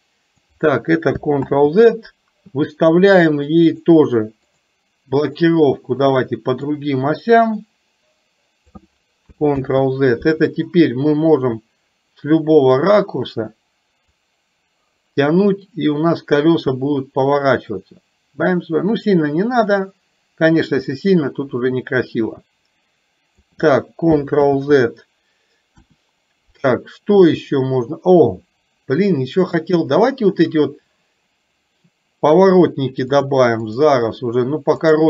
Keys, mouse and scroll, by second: 3.8 click, 6.9-8.8 drag, 10.8-12.8 middle drag, 14.3-23.5 drag, 25.9 KP_1, 27.5 middle click, 33.3 click, 34.9 click.